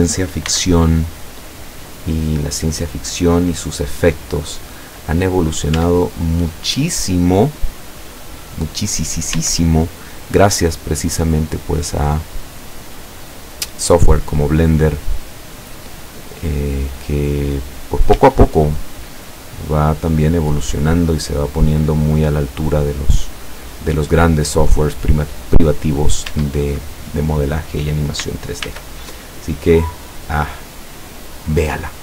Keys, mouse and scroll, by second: 0.5 x, 0.9 click, 4.4 scroll down 2, 5.2-5.9 middle drag, 5.8 Tab, 6.2-8.7 middle drag, 8.9 scroll up 2, 11.2 right click, 12.2-14.3 middle drag, 14.5 middle click, 15.0-16.2 middle drag, 16.3-18.1 middle drag, 18.2 Tab, 18.6-18.9 scroll down 1, 19.1-20.1 middle drag, 20.4-21.6 middle drag, 22.8 middle click, 23.6-24.4 middle drag, 24.6 scroll up 1, 26.0 middle click, 26.4 Tab, 28.7 ctrl+r, 29.9 click.